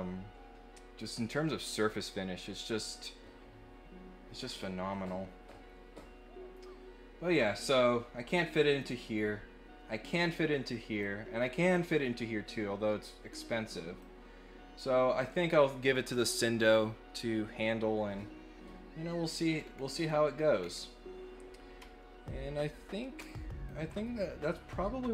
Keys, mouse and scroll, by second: 8.8 click, 11.0 click, 14.0 click, 19.5 scroll down 2, 19.9 scroll up 1, 20.6 scroll up 1, 23.2 ctrl+click, 24.5 middle click.